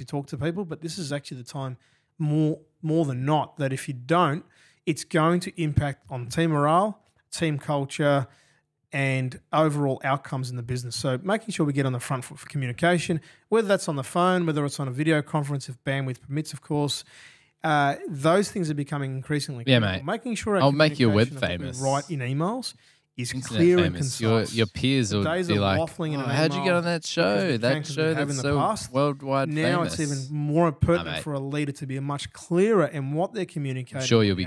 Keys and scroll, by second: 7.2 F7, 8.2 Delete, 10.4 g, 12.8 d.